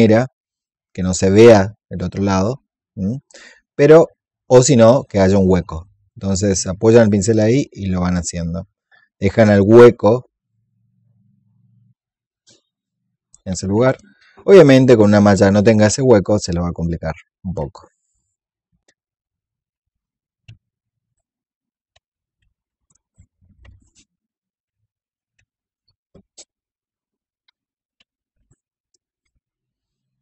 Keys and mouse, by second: 2.5-5.3 drag, 6.6-10.2 drag, 11.6 shift+click, 13.9 alt+click, 16.0 shift+click, 17.9 alt+click, 19.3 shift+click, 19.8 click, 19.9 alt+click, 20.5 shift+click, 20.9 click, 21.4 click, 22.2 click, 22.5 shift+click, 22.7 alt+click, 22.9 click, 23.3 shift+click, 23.8 click, 24.3 shift+click, 24.7 click, 25.2 shift+click, 25.4 click, 25.9 shift+click, 26.3 click, 26.5-30.2 drag.